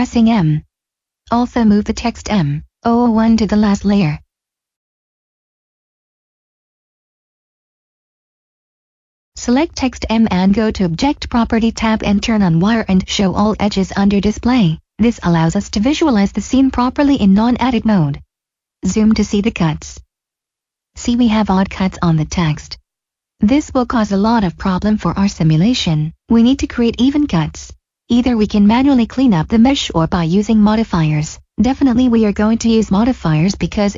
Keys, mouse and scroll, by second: 1.3 m, 2.8 click, 6.2 click, 10.1 click, 14.1-15.4 scroll down 1, 17.6 click, 20.0 middle click, 24.3 middle click, 30.7 middle click, 31.9 shift+middle click.